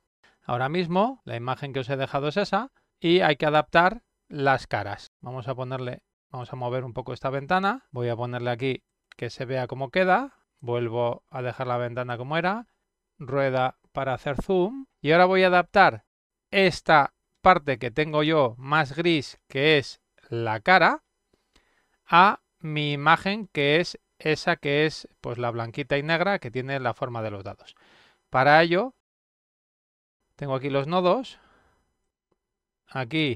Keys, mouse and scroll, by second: 1.4 middle click, 1.5 middle click, 1.8 middle click, 7.0-8.4 drag, 9.7 click, 11.2-12.2 drag, 13.1-14.1 middle drag, 14.3 middle click, 30.4 click, 31.6 click, 32.7 click.